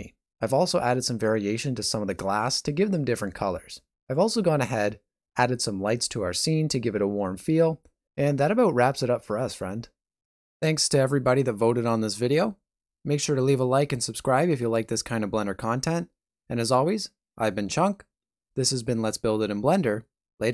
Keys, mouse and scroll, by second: 0.2 shift+middle click.